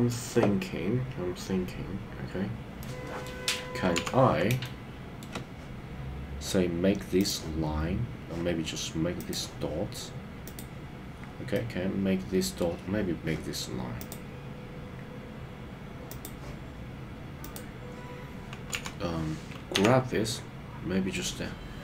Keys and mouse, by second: 2.8 middle click, 4.1 KP_3, 4.6 shift+middle click, 10.4 click, 11.5-12.6 middle drag, 14.1 click, 16.0 click, 17.4 click, 18.7 KP_3, 19.9 g.